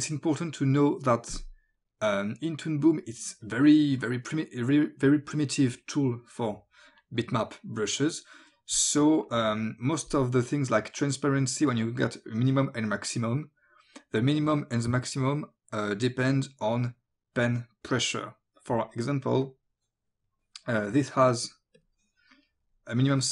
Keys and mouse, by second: 1.3 click, 3.5 click, 9.3 click, 19.5 click, 20.8 click.